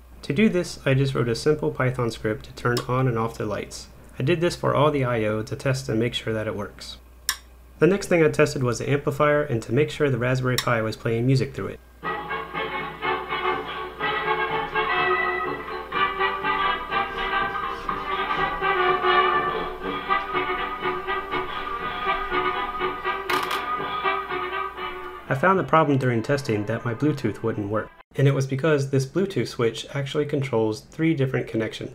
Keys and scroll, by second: 0.5 Down, 1.2 Up, 1.5 Up, 2.4 Up, 2.7 Return, 4.6 Up, 6.5 Up, 6.7 Up, 7.2 Return, 7.3 Return.